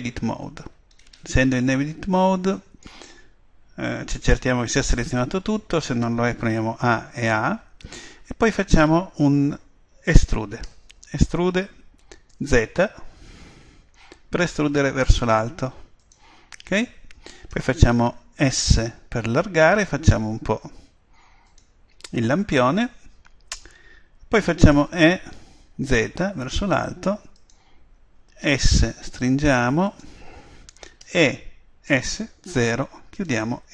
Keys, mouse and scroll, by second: 0.9-4.3 middle drag, 6.6 a, 7.2 a, 10.6 e, 14.1 click, 16.1 click, 17.9 middle click, 18.4 s, 21.6 click, 24.9 e, 27.6 click, 30.0 click, 31.0 e, 33.2 click.